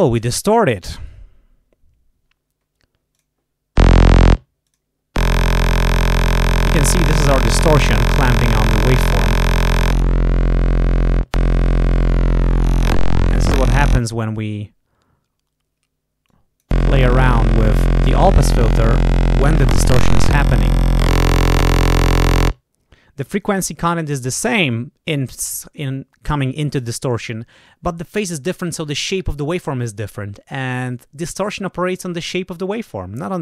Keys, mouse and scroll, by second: 3.0 click, 4.6 click, 9.8-11.1 drag, 11.6-13.8 drag, 16.2-17.8 drag, 18.1-22.2 drag.